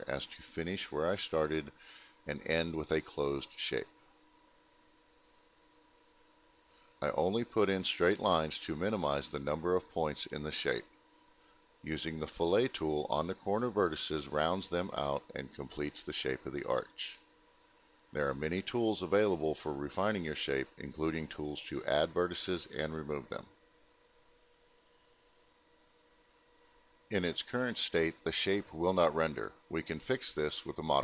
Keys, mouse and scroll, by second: 0.9 click, 1.8 shift+click, 2.5 click, 3.4 click, 5.8 right click, 7.3 click, 8.1 click, 9.4 click, 10.1 click, 11.2 click, 12.1 click, 12.8 ctrl+click, 13.2 click, 14.8 right click, 14.9 right click, 15.0 click, 16.1 click, 18.5 click, 19.0 click, 21.0 click, 22.8 right click, 23.2 right click, 23.2 click, 24.1 click, 25.2 click, 25.3 click, 27.6 click, 28.4 click, 30.1 alt+middle click.